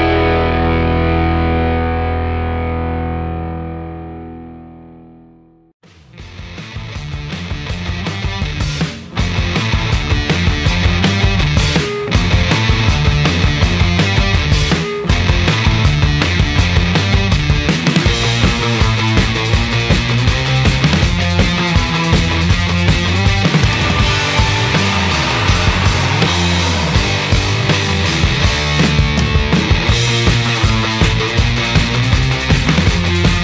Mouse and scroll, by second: 5.8-10.1 drag, 10.5 right click, 11.7 click, 12.9-14.5 drag, 15.7 click, 18.0 right click, 18.7 right click, 22.4-23.5 drag, 23.9 right click, 25.4-27.6 drag, 27.9 click, 28.9 right click, 30.8 click, 31.8 click.